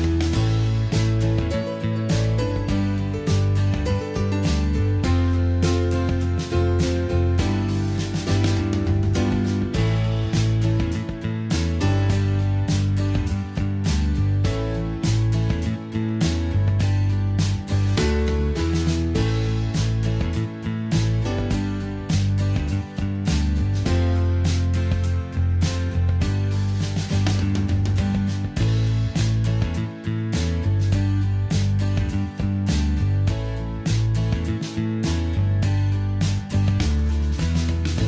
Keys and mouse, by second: 0.7 a, 5.2 g, 7.1 r, 8.4-8.9 middle drag, 9.7 r, 11.6 g, 16.2 r, 22.4 n, 28.4 middle click, 28.6-30.5 middle drag, 32.6 r, 37.6 r.